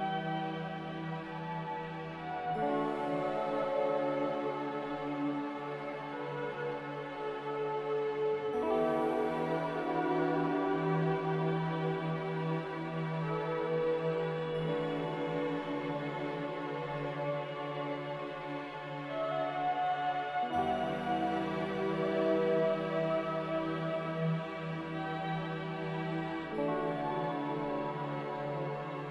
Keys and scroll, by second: 20.5 a.